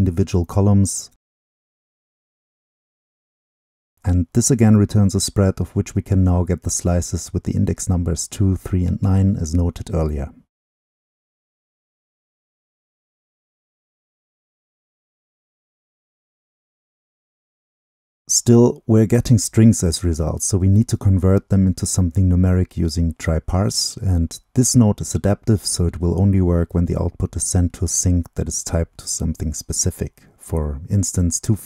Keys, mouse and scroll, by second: 0.0 click, 1.4-2.5 drag, 2.5-2.8 middle drag, 2.8-7.4 drag, 7.7-9.8 drag, 10.2-12.6 drag, 14.0 drag, 14.1-15.2 right drag, 15.2-17.8 drag, 20.8 click, 21.3-23.1 drag, 24.3-26.6 drag, 26.6-27.4 middle drag, 27.4-30.6 drag, 30.6 ctrl+c, 31.0 click, 31.3 ctrl+v.